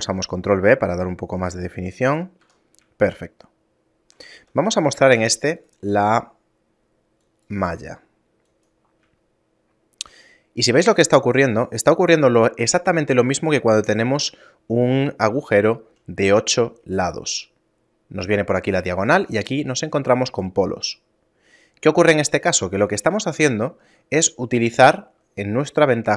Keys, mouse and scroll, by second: 2.1 a, 2.4 Tab, 3.0 shift+middle click, 4.4 shift+space, 5.6 click, 6.4 middle click, 7.3 click, 9.3 shift+middle click, 10.2 middle click, 10.8-11.7 scroll up 2, 14.1 shift+middle click, 22.9-23.4 scroll down 2, 23.4 Tab, 23.6 middle click.